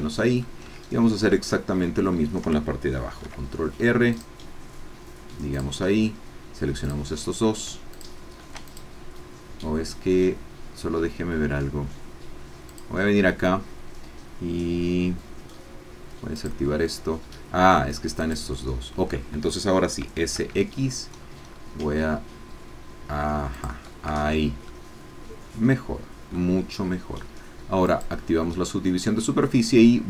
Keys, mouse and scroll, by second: 0.3 click, 0.7-2.5 shift+drag, 3.1 ctrl+r, 5.7-7.1 drag, 7.9 shift+click, 8.6 shift+click, 12.7 click, 16.3 click, 18.4 shift+click, 20.0 s, 20.3 x, 21.1-21.7 scroll down 4, 22.1 scroll down 2, 23.6 click, 24.2 Tab, 24.7-26.5 middle drag, 27.9 click, 28.5-30.0 middle drag.